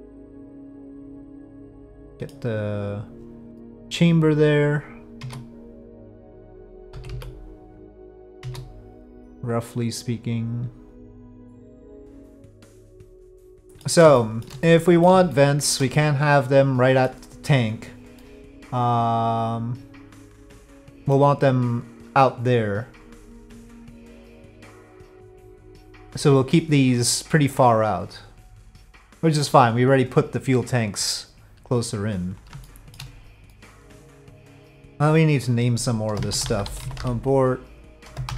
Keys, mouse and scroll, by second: 1.9 middle click, 3.1 click, 3.6 middle click, 5.2 3, 5.3 click, 6.9 KP_5, 7.1 KP_1, 8.4 s, 12.9-13.8 middle drag, 14.3 shift+middle drag, 14.8-15.1 middle drag, 15.3-15.7 shift+middle drag, 16.1-17.0 middle drag, 18.2-21.2 middle drag, 23.7-25.3 middle drag, 32.7 shift+middle drag, 33.5 middle click, 35.1-38.3 drag.